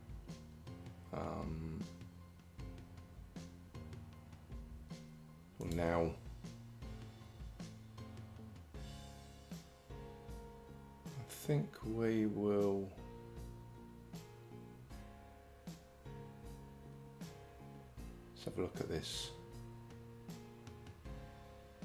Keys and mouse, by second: 5.8 click.